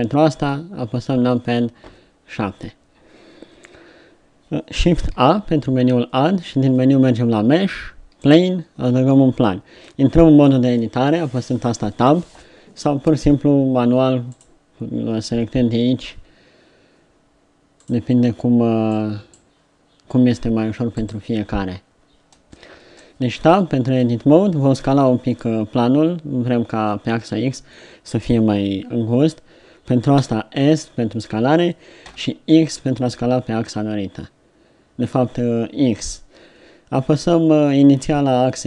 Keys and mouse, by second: 1.9 KP_7, 5.3 shift+a, 12.0 Tab, 16.0-17.9 drag, 22.4 Tab, 22.9 Tab, 30.2 s.